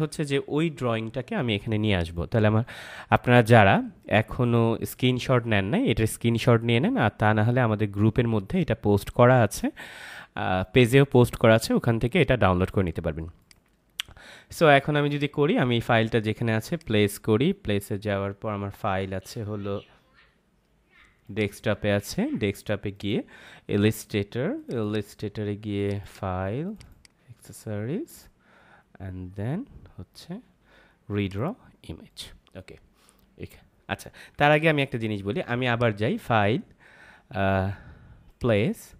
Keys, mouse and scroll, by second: 0.1 ctrl+z, 1.9 click, 13.4 click, 20.3-21.2 scroll up 1, 21.2 click, 23.4 i, 24.5 click, 28.4 scroll down 1, 31.2 click, 34.6 ctrl+z, 35.7 click.